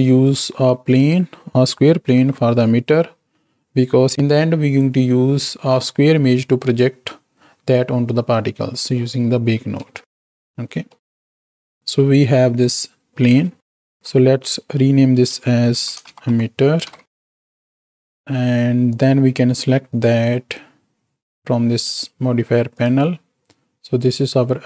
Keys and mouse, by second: 0.1 shift+a, 2.1 KP_7, 9.9 ctrl+space, 10.8-11.5 drag, 14.7 F2, 16.9 t, 19.8-20.2 drag, 21.2 click, 21.7 click.